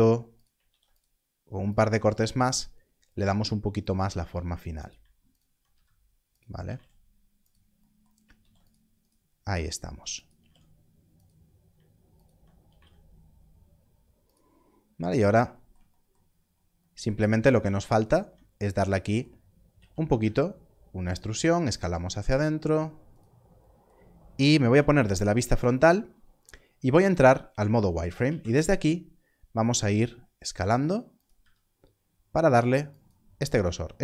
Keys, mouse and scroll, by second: 0.3 click, 0.6 ctrl+r, 1.6 click, 3.0 click, 3.8 alt+click, 5.3 alt+click, 5.6 s, 6.3 click, 6.5 g, 6.6 z, 7.4 click, 8.3 ctrl+r, 9.0 right click, 10.0 s, 10.1 click, 10.3 z, 11.1 click, 12.1 alt+click, 12.7 z, 14.2 click, 14.6 scroll up 1, 16.2-17.0 scroll down 1, 18.0 alt+click, 19.7 e, 23.1 s, 24.6 click, 27.3 scroll up 1, 28.1 scroll up 1, 31.1 click, 31.3 s, 32.9 click, 33.4 click.